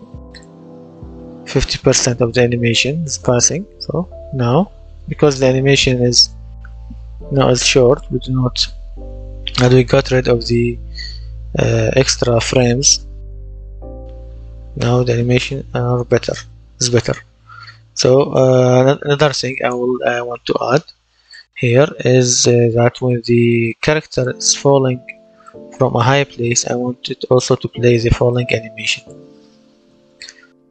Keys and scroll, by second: 0.5 w, 1.3 space, 2.9 space, 4.4 space, 6.0 space, 7.4 space, 9.6 space, 11.7 w, 14.7 space, 15.9-18.2 typing, 19.1 Escape.